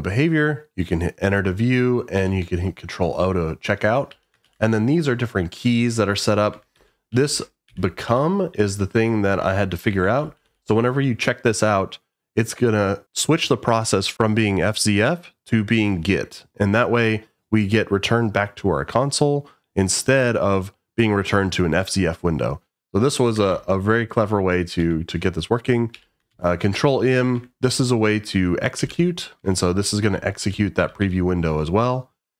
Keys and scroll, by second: 2.2 Escape, 4.1 j, 4.4 shift+v, 5.6 j, 6.5 Escape, 6.7-12.0 typing, 23.4 shift+v, 24.8 Escape, 25.9 j, 26.3 shift+v, 27.3 Escape, 28.8-31.5 typing.